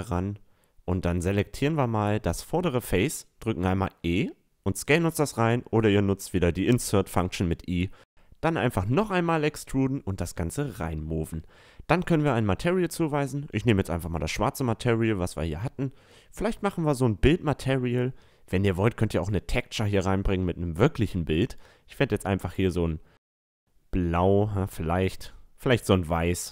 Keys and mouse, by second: 0.5 Tab, 2.1-3.9 drag, 2.6-4.6 right drag, 3.3 e, 3.9 s, 6.1 e, 7.2-9.1 drag, 8.5 a, 8.7 Tab, 9.3 a, 9.6-10.0 middle drag, 10.0-11.9 right drag, 11.0-12.8 drag, 13.9-14.4 middle drag, 15.2 Tab, 15.9-17.8 right drag, 17.1-19.7 drag, 20.3-21.9 drag, 20.6 Tab, 21.3 a, 21.9 middle click, 22.4 Tab, 22.8 click, 22.9-24.8 middle drag, 23.7-25.5 drag, 23.7-24.7 right drag, 25.6 Tab, 25.9 middle drag.